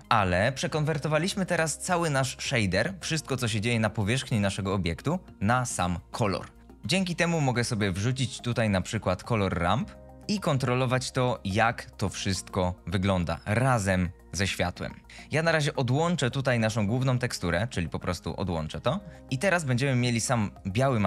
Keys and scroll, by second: 6.7 ctrl+z, 7.4 shift+a.